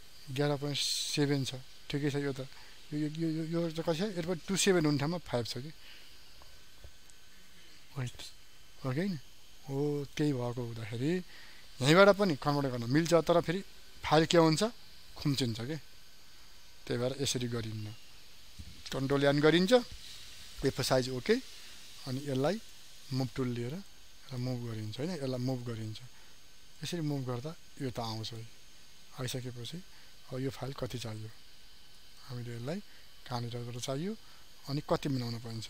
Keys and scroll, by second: 18.6 ctrl+n, 34.5 ctrl+t.